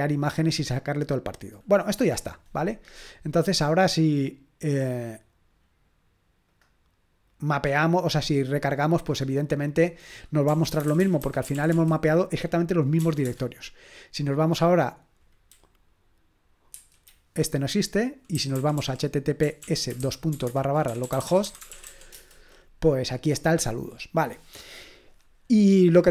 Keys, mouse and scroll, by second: 6.5 click, 7.5 click, 7.8 click, 9.5-10.5 drag, 10.2-13.0 typing, 13.3 Return, 16.7 F5, 17.7 click, 18.1-22.3 typing, 24.5-26.1 drag.